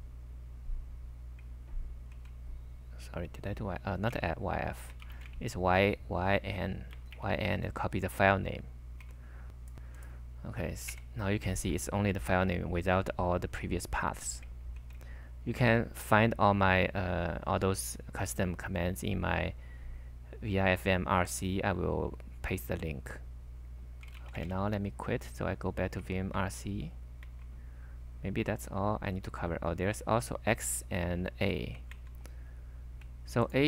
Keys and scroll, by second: 2.2 ctrl+c, 4.2-5.6 typing, 6.9-7.6 typing, 8.9-9.6 typing, 10.9 super+v, 14.8 ctrl+c, 23.8-24.8 typing, 26.1-27.0 typing, 27.2 super+Tab, 31.9 super+Tab.